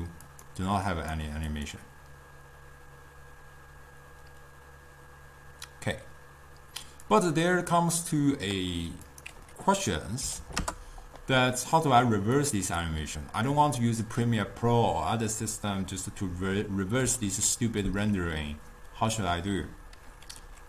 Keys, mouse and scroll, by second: 7.2-12.2 drag, 12.5 click, 12.9-14.2 drag, 17.1 ctrl+a.